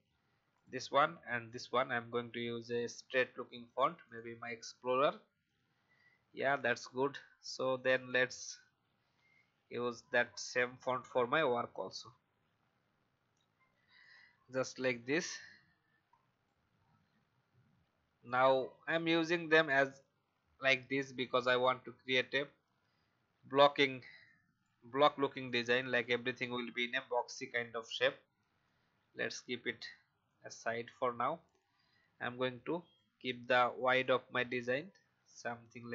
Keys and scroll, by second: 2.9 e, 3.2 x, 9.0 Delete, 12.0 v.